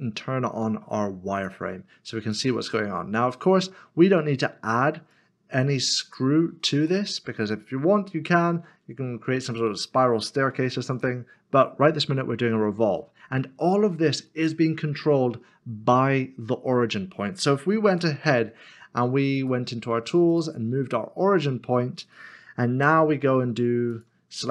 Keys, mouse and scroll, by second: 1.3 click, 2.7 middle click, 5.1 click, 6.8 click, 7.5 middle click, 9.4-9.8 scroll down 1, 13.0 middle click, 19.3 click, 23.9 g.